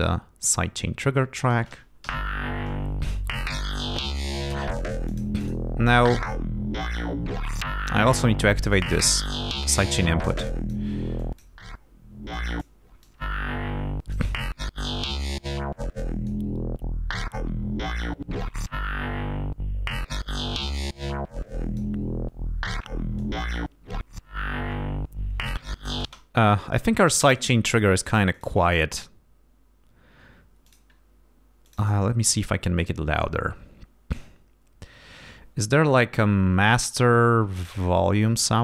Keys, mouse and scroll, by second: 1.4 click, 2.0 l, 5.0 click, 5.4 click, 8.7 click, 10.4 click, 11.1 click, 12.3 click, 13.0-14.1 drag, 15.9 click, 18.4 click, 20.6-21.9 drag, 23.1-24.2 drag, 26.1 space, 27.3 click, 28.3 click, 30.6 click, 31.6 click.